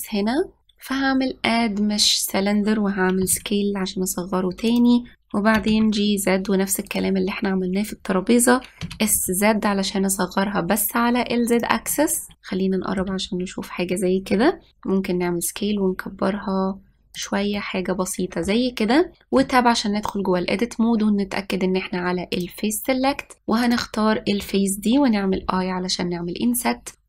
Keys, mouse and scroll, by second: 1.0-3.9 drag, 3.9 s, 6.2 g, 9.5 s, 12.4-12.9 scroll up 3, 12.9-13.9 shift+middle drag, 13.9 scroll down 1, 15.1 s, 18.2-20.0 middle drag, 20.0 Tab, 23.0-24.4 drag, 26.0 i.